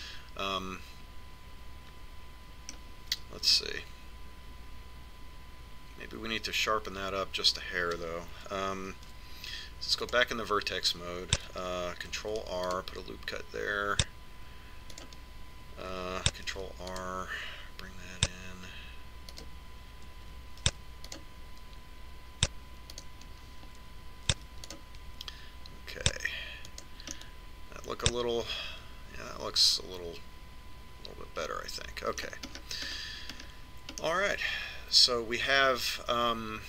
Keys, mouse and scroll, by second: 1.1-3.1 middle drag, 4.6 Tab, 10.1 ctrl+Tab, 13.5 ctrl+r, 17.6 ctrl+r, 21.9 ctrl+r, 25.6 ctrl+r, 28.4-30.2 middle drag, 33.8-36.6 middle drag.